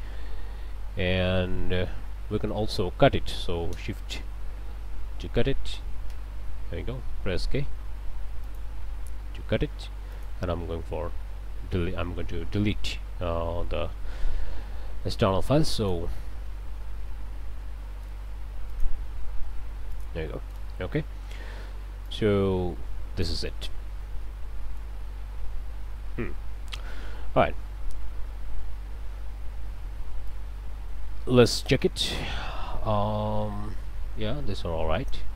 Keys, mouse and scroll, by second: 0.2 scroll down 2, 1.4 scroll down 2, 1.7 right click, 3.7 shift+Right, 6.0 Right, 8.4 click, 9.0 k, 10.1 click, 11.0 Delete, 13.6 Delete, 14.7 click, 15.1-15.4 scroll up 2, 15.8 click, 16.1 Delete, 18.1 ctrl+space, 18.7 ctrl+click, 19.5 Delete, 19.9 click, 20.6 ctrl+space, 22.0-23.5 drag, 23.6-25.0 drag, 25.3-25.9 scroll down 4, 26.2 click, 26.9 click, 30.3-35.3 drag.